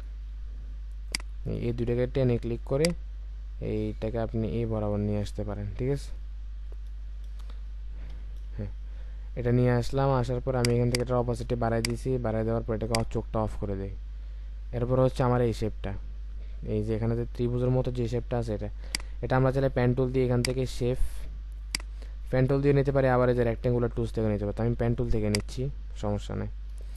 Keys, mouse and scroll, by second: 5.7 alt+scroll down 1, 8.1 typing, 10.9 double click, 26.8 ctrl+z.